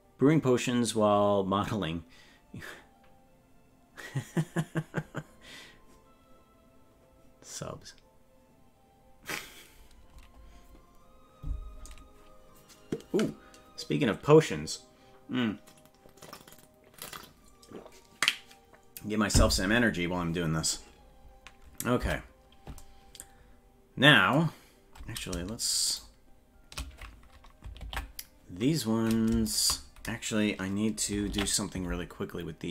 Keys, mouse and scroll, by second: 3.1 typing, 4.6 typing, 22.2 Tab, 25.9 shift+right click, 28.0 ctrl+l, 29.5 shift+right click, 31.3 ctrl+l.